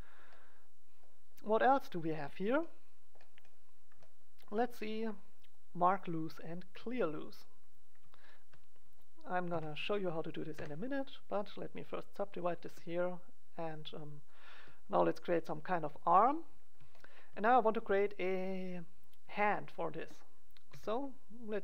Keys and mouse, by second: 1.9 click, 2.6-3.8 middle drag, 7.4-9.9 right drag, 9.4 KP_1, 10.5 w, 12.4 right click, 12.6 g, 13.1-15.5 drag, 14.5 g, 15.7 click, 16.0 click, 20.6 e.